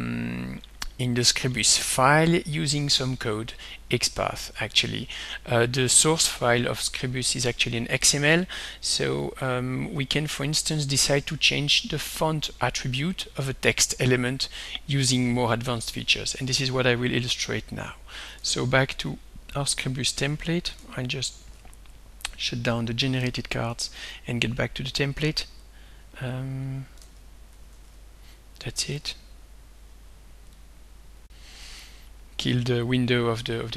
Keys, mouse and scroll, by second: 1.7 scroll down 2, 2.9 scroll up 2, 3.7-4.4 scroll down 4, 8.8 scroll down 2, 9.4-10.1 scroll up 2, 10.1-12.2 scroll up 1, 12.2 click, 18.4 alt+Tab, 20.3 click, 20.8 alt+Tab, 21.4 alt+Tab, 22.7 click, 23.2 alt+Tab, 26.7 click, 27.1 alt+Tab, 27.5 alt+Tab, 29.0 click, 30.6 click, 31.3 click, 33.6-33.7 drag.